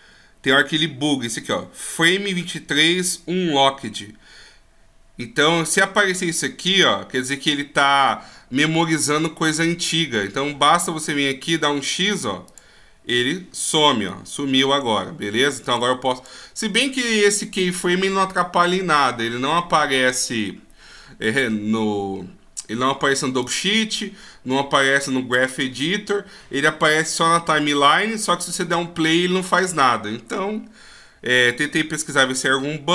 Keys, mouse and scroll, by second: 12.6 click, 14.2 click, 15.8 click, 16.2 click, 23.6 click.